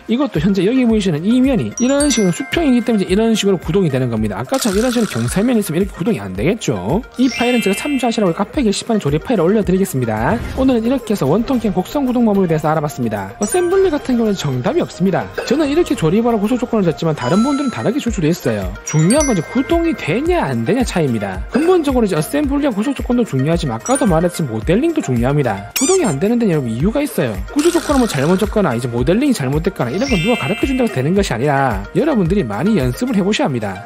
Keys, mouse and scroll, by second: 1.8 shift+click, 5.6 click.